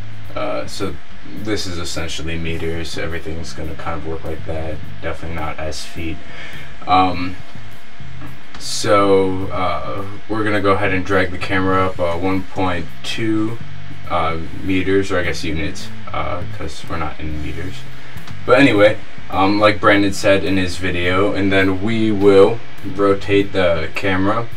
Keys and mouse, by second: 8.6-10.5 drag, 16.7-18.3 middle drag, 18.3-20.3 drag, 20.3 middle click, 23.2 r, 23.5 z.